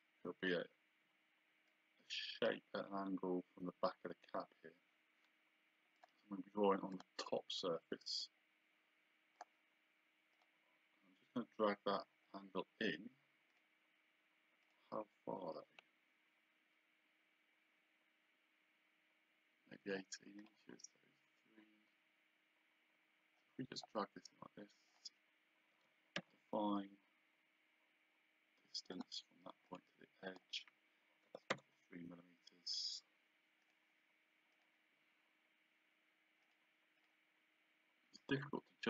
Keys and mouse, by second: 1.7 click, 6.0 click, 9.4 click, 13.5 click, 14.7 click, 20.4 click, 24.9 click, 25.8 Escape, 26.2 d, 28.9 click, 31.3 KP_3, 33.7 click, 34.8 click, 36.5 click.